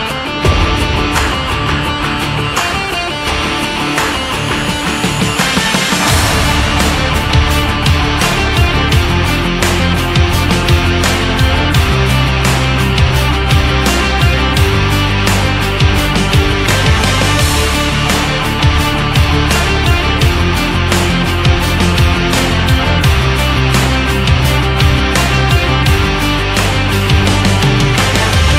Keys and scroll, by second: 15.2 ctrl+s.